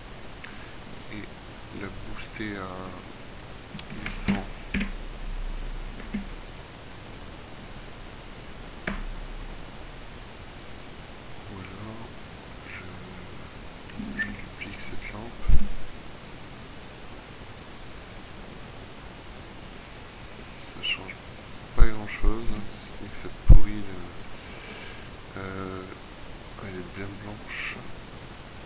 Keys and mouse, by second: 3.2 KP_0, 6.1 ctrl+w, 9.0 KP_0, 14.2 shift+d, 15.2 click, 15.6 r, 18.2-19.2 drag, 19.6 middle click, 21.9 x, 24.6-26.0 middle drag.